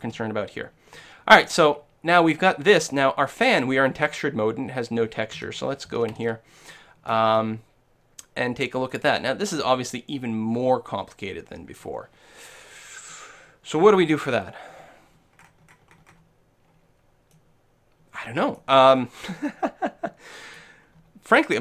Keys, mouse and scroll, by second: 0.1-1.4 shift+middle drag, 5.4 Tab, 5.9 a, 6.2 a, 6.7-11.1 middle drag, 13.7-14.8 middle drag, 14.8-15.2 scroll up 1, 15.2-21.6 middle drag.